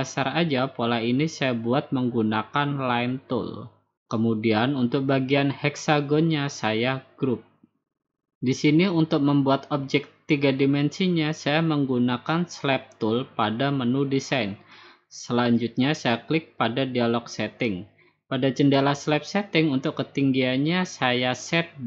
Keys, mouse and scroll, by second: 0.2 click, 4.1 click, 8.1 click, 9.0 click, 11.4 click, 11.9 click, 13.0-14.1 drag, 14.3-15.4 drag, 16.6-17.7 drag, 21.4 typing.